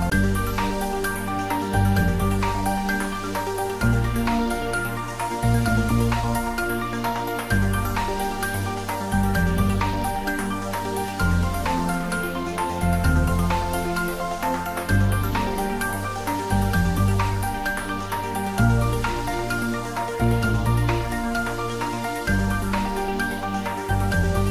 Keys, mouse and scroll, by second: 4.6 click, 4.8 ctrl+s, 10.9-12.0 scroll down 2, 12.6 ctrl+s, 13.8 click, 16.7 ctrl+s, 21.7 ctrl+s, 21.8 click.